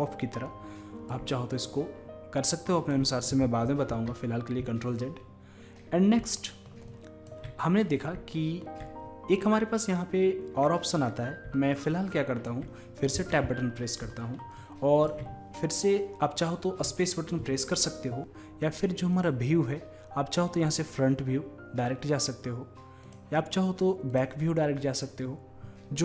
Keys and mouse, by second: 4.2 ctrl+z, 6.4-7.0 middle drag, 7.0-8.6 drag, 8.6-11.9 middle drag, 11.9-13.2 drag, 13.2 Tab, 13.2-16.3 middle drag, 24.2 click.